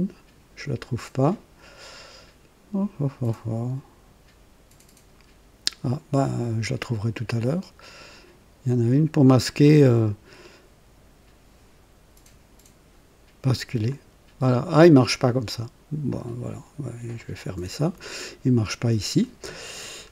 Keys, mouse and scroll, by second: 13.9 click, 14.7 click, 16.1 click, 17.2 click, 19.8-20.1 scroll up 2.